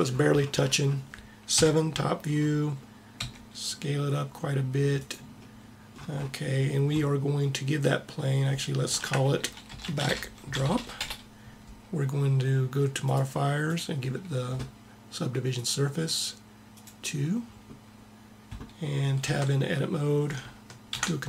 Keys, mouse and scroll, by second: 1.5 KP_7, 3.2 s, 8.9-10.7 drag, 12.9-15.5 drag, 16.8-18.5 drag, 19.2 Tab, 20.9 ctrl+r.